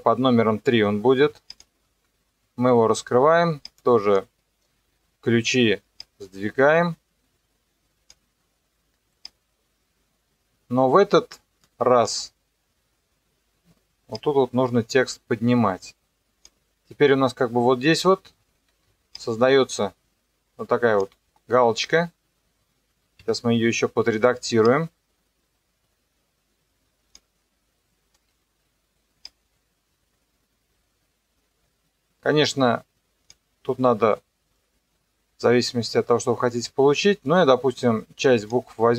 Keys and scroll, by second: 1.9 typing, 18.7 ctrl+2, 23.2 Escape.